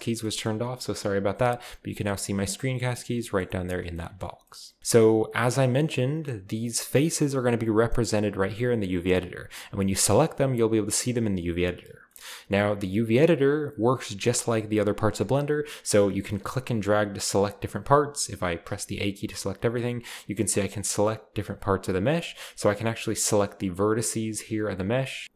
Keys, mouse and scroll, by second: 0.2-1.2 shift+middle drag, 3.2-4.8 shift+middle drag, 4.2-4.8 scroll up 1, 5.2-6.6 scroll down 1, 5.6-6.6 middle drag, 6.6-9.1 right drag, 9.4 right click, 16.2 click, 17.0 click, 17.3-18.4 drag, 18.6 a, 18.8 a, 20.0-21.0 drag, 21.2 middle click, 21.5 middle click, 22.0 right click, 22.9 g, 23.7 right click, 24.3-25.2 right drag, 24.4 g, 25.2-25.3 scroll down 1.